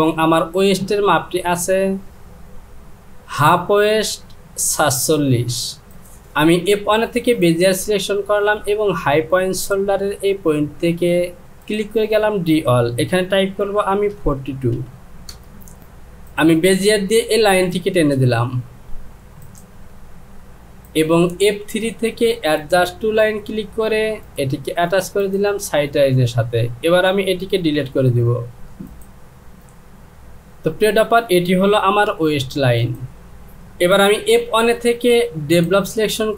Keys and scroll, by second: 14.7 KP_2, 15.3 Return, 32.1 Delete.